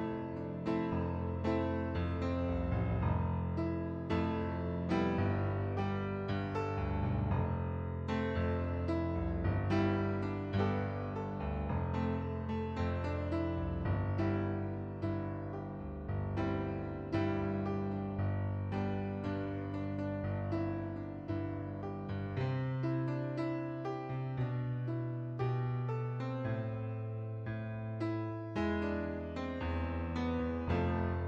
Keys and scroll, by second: 0.8 typing, 1.0 Return, 6.3-7.3 typing.